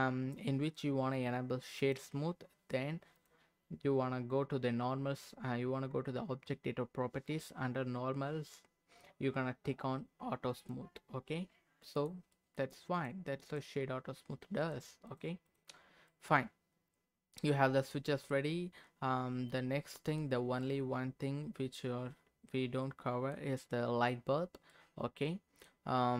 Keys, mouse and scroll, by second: 3.1 click, 10.5 click, 11.9 click, 12.3 middle click, 13.0 click, 13.5 click, 14.6 click, 15.5 click, 15.8 scroll down 1, 16.1-18.0 middle drag, 18.0-18.5 scroll down 2, 18.3-20.3 middle drag, 20.3-21.0 scroll down 2, 20.6-23.3 middle drag, 24.7-25.8 middle drag.